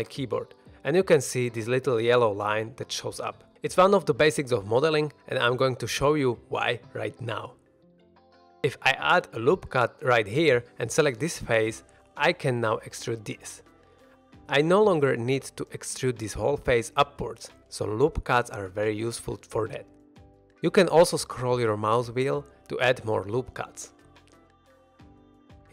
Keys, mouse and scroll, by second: 0.0 ctrl+r, 6.8 shift+middle click, 6.8-7.3 scroll down 1, 8.8 scroll up 1, 8.9 ctrl+r, 9.7 right drag, 10.1 shift+middle drag, 10.7 3, 11.1 click, 11.6-11.9 middle drag, 12.4 e, 13.4 click, 13.6 shift+middle drag, 13.8 middle drag, 14.9 ctrl+z, 15.0 ctrl+z, 16.0 ctrl+z, 16.3 3, 16.6 click, 16.7 e, 17.2 click, 17.5 shift+middle click, 17.6 middle drag, 18.8 ctrl+z, 20.7 ctrl+r, 25.4 shift+middle drag.